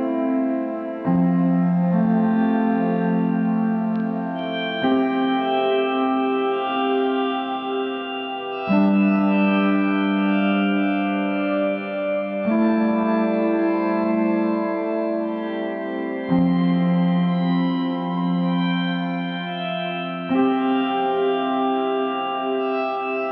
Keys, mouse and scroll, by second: 2.9-4.8 middle drag, 4.8-7.1 drag, 7.1-8.0 scroll down 2, 8.0-11.5 drag, 11.5-12.9 middle drag, 12.9-16.3 scroll up 2, 16.3-17.6 scroll up 1, 17.6 scroll up 1, 18.5-21.7 drag, 21.7-22.8 middle drag, 22.8-23.3 drag.